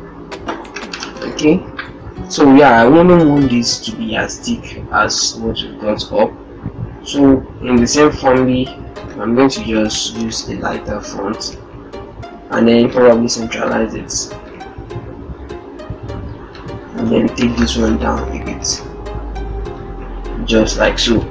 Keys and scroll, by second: 0.6 ctrl+Return, 1.6 ctrl+Return, 9.9 ctrl+Return, 11.2 ctrl+Return, 20.8 ctrl+-, 20.9 ctrl+0.